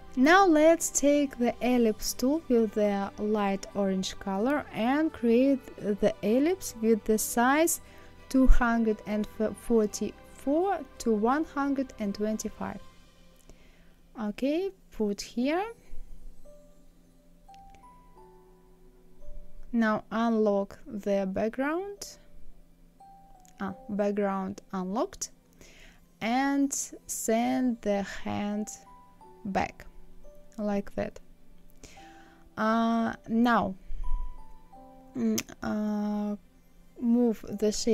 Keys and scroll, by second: 35.3 Down.